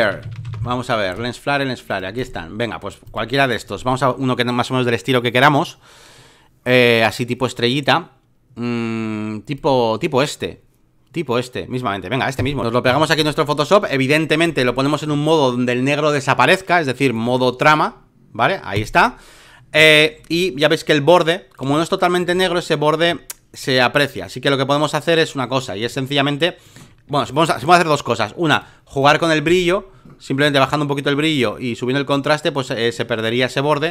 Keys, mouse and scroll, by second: 0.0-0.9 typing, 1.9-5.1 drag, 8.3-9.5 middle drag, 9.5-11.6 drag, 12.3 right click, 12.8 v, 13.1-14.4 drag, 14.4 space, 14.6 click, 17.1-21.7 drag, 21.7 space, 21.8 click, 22.3-25.8 drag, 25.8 space, 25.9 click, 28.5-33.9 drag.